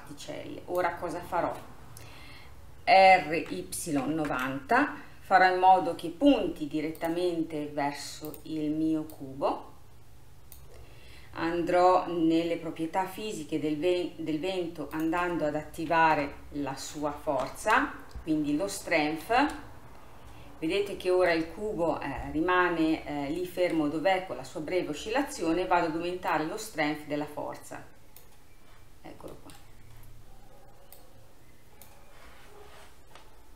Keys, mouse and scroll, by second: 3.2 r, 8.3-9.3 drag, 13.1-15.0 scroll up 2, 15.0-18.0 drag, 19.4 space, 20.7-26.4 middle drag, 26.4-29.0 drag, 29.0-29.4 scroll down 3, 29.4-31.0 middle drag, 31.0-33.5 drag.